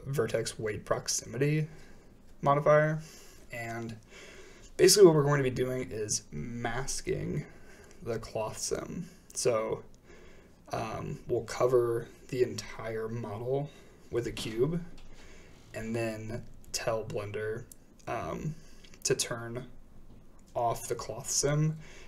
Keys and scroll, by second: 4.5 a, 19.5 a.